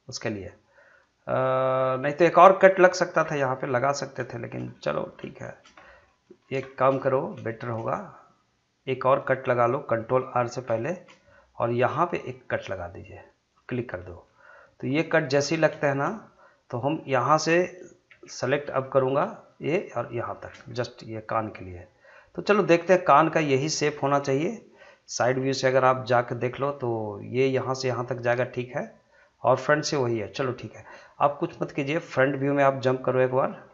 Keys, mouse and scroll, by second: 1.8-2.1 scroll down 1, 2.1 middle click, 2.8-3.2 scroll down 1, 3.2 middle click, 3.8-4.2 scroll up 1, 4.6 shift+middle click, 5.2 scroll up 1, 5.4 shift+middle click, 5.8 scroll down 2, 6.0 middle click, 6.4 scroll up 2, 6.7 shift+middle click, 8.2 middle click, 10.6 ctrl+r, 12.2 click, 14.0 middle click, 14.5 scroll up 1, 15.1 shift+middle click, 15.6 scroll up 1, 15.8 shift+middle click, 16.3-18.1 middle drag, 18.1 3, 18.7 click, 19.6 shift+click, 20.4 shift+scroll down 1, 20.8-22.1 middle drag, 22.1-23.6 middle drag, 23.6 middle click, 25.5-29.2 middle drag, 29.2-30.8 middle drag, 31.2 scroll down 1, 31.5-33.7 middle drag.